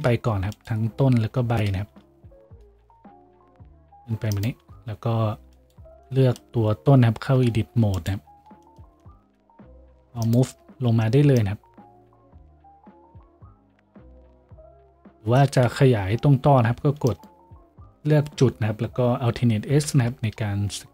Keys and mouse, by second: 2.9 g, 4.7 middle click, 4.7 a, 5.7-6.7 right drag, 6.7-12.0 middle drag, 7.4 shift+Tab, 12.0-19.7 drag, 15.5 g, 19.7-20.9 alt+middle drag, 19.9 alt+s.